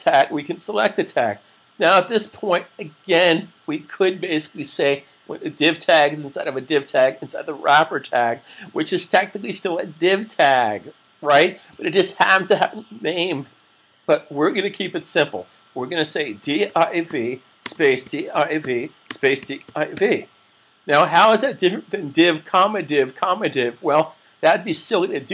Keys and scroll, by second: 16.4-19.9 typing.